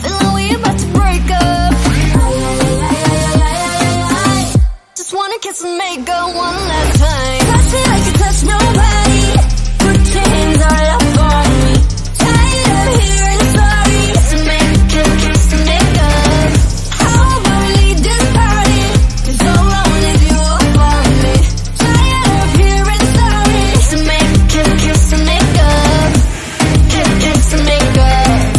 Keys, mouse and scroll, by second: 1.7 v, 2.1 click, 3.0 click, 4.0 space, 5.0 drag, 5.4 click, 6.0 space, 6.3 click, 8.0 click, 8.7 ctrl+z, 9.4 right click, 10.5 click, 11.5-12.1 scroll down 31, 11.8 middle click, 12.1 middle click, 12.5-13.5 drag, 14.3 v, 14.8 click, 15.8 click, 16.6 space, 17.0 KP_0, 17.7-18.1 scroll up 9, 18.1 scroll down 1, 18.3 click, 18.7 click, 19.9 space, 20.3 click, 22.2-23.4 drag, 23.4 scroll up 2, 23.6-25.6 middle drag, 25.6-28.4 drag, 28.4-28.5 scroll up 1.